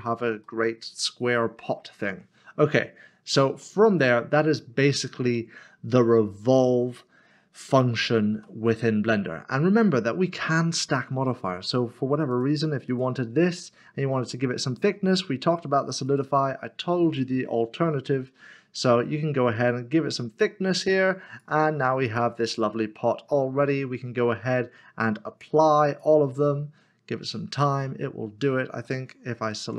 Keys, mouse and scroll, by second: 0.4 middle click, 3.6 middle click, 7.6 middle click, 8.7 middle click, 12.3 click, 16.1 click, 18.1 click, 22.4 middle click, 25.8 click, 29.6 Tab.